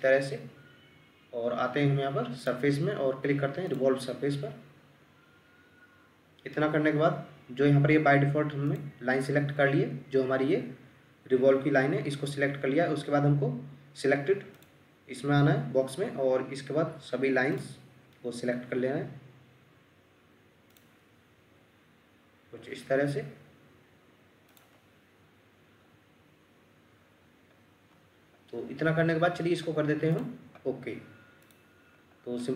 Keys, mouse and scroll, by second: 18.1-18.6 scroll down 1, 21.2 scroll up 1, 22.1 scroll down 1, 27.0-27.4 scroll down 1, 27.9-28.2 scroll up 1, 32.4 middle click.